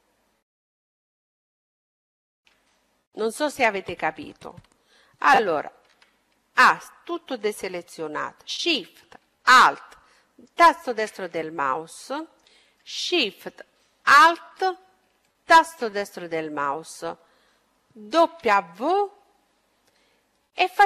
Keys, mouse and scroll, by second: 1.8-4.5 middle drag, 5.1 a, 5.8 a, 10.1-11.8 right drag, 11.2-15.5 middle drag, 15.1-17.0 right drag, 18.1 w.